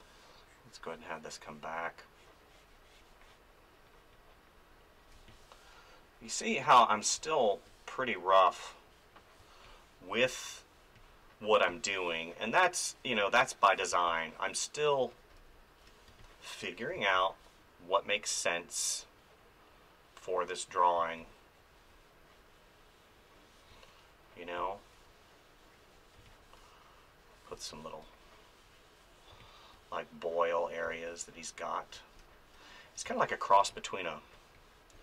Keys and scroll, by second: 5.1 space, 7.1 space, 9.4 space, 13.9 space, 16.1 space, 21.0 space, 23.7 space, 26.2 space, 29.3 space, 33.0 space.